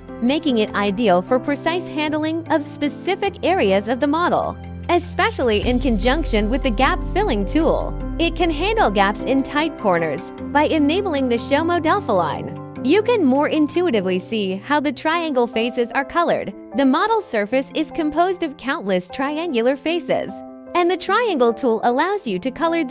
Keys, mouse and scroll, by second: 8.3 click, 8.6 click, 8.9 right click, 9.8-10.2 scroll, 11.8 click, 16.2 click, 17.0 scroll, 21.7 click.